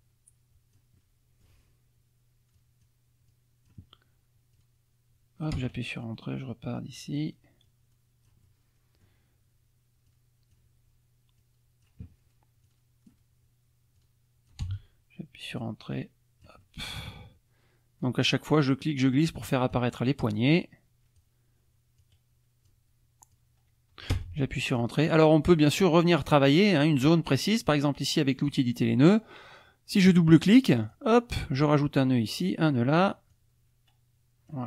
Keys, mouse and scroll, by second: 1.1 click, 2.6 click, 3.3 click, 4.5-5.7 drag, 5.6 Return, 6.8 click, 7.6 click, 8.4 middle click, 9.0 click, 10.1 click, 11.4-13.3 drag, 14.0 click, 14.6 Return, 15.6-17.3 drag, 18.3-19.9 drag, 20.5 click, 22.0 click, 23.3 click, 24.1 Return, 24.5 click, 25.6 click, 28.4 click, 30.7 click, 32.3 click, 33.3-34.6 drag.